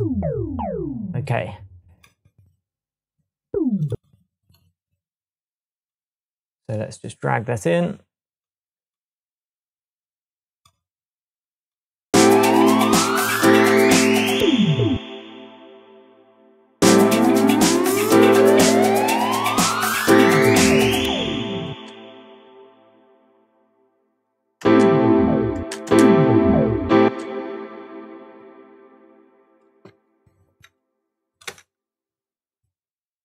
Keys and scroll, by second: 14.9 space, 21.7 space, 24.6 space, 27.0 space, 29.9 shift+Tab, 31.5 BackSpace, 32.5 BackSpace.